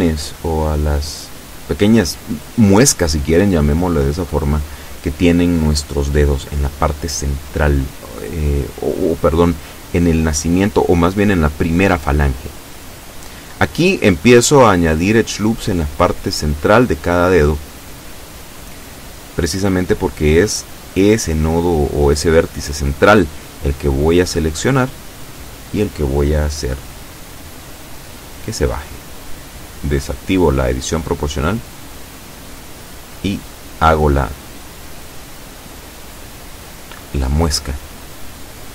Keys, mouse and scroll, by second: 2.3 shift+right click, 3.0 shift+right click, 4.4-6.5 shift+middle drag, 6.5 scroll down 2, 7.8 KP_7, 11.9 ctrl+r, 12.7 click, 13.2 click, 14.6 ctrl+r, 15.1 ctrl+click, 16.6 ctrl+r, 17.4 ctrl+click, 17.7 ctrl+click, 18.9 middle click, 20.6 right click, 21.6 shift+right click, 23.0 shift+right click, 23.8 shift+right click, 24.3-25.5 shift+middle drag, 25.6-26.8 middle drag, 27.8-29.2 drag, 29.8 ctrl+z, 30.7 o, 31.2-35.2 drag, 35.9 middle click, 36.0 scroll up 1, 37.0 middle click, 37.7 middle click.